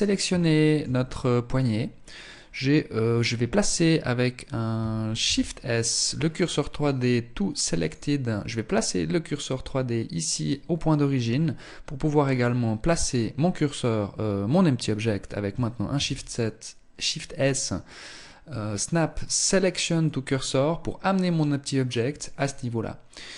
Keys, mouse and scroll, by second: 0.5 middle click, 1.1 scroll up 4, 4.5 shift+s, 10.0-10.3 scroll up 2, 10.5 scroll down 3, 11.7 right click, 15.2 shift+s, 20.3-20.7 scroll up 4, 21.7 right click, 22.5 right click.